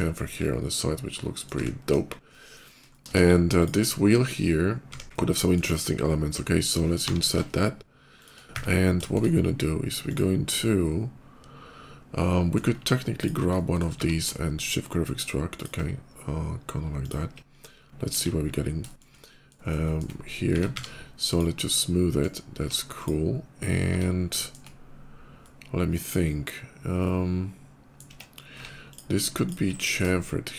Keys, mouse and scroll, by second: 0.2-1.3 middle drag, 2.1 middle click, 2.5 middle click, 2.7 shift+middle click, 3.0 KP_5, 3.4 click, 3.8 middle click, 4.9 KP_5, 5.0 Tab, 5.0 middle click, 8.0 shift+click, 8.9 shift+middle click, 9.7 shift+click, 10.3-12.4 shift+middle drag, 13.0 ctrl+click, 13.3 ctrl+middle click, 13.7 q, 15.4 click, 16.9 shift+click, 17.3 s, 17.4 /, 18.0 KP_5, 18.4 middle click, 18.7 shift+middle click, 19.0 shift+middle click, 19.6 middle click, 20.3 Tab, 20.5 q, 21.1 click, 21.6 middle click, 22.3 Tab, 22.8 click, 24.2 shift+middle click, 24.3 shift+Tab, 25.2-27.7 middle drag, 28.0 Tab, 28.4 Tab, 28.7 click, 29.2 ctrl+click, 29.7 ctrl+b, 30.5 ctrl+shift+b, 30.5 shift+right click.